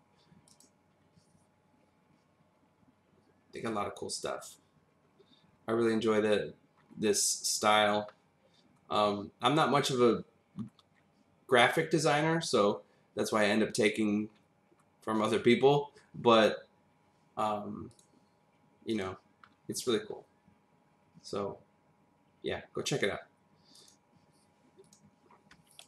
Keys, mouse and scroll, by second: 2.9 click, 5.1-6.7 scroll down 5, 6.7-8.1 scroll up 2, 8.1-8.7 scroll down 2, 10.5-12.0 scroll up 4, 12.0-13.3 scroll down 1, 13.3 click, 14.3-14.8 scroll up 2, 16.3 scroll up 2, 17.9 click, 18.9 click, 19.5-20.2 scroll down 3, 23.8 click, 24.8 click, 25.7 click.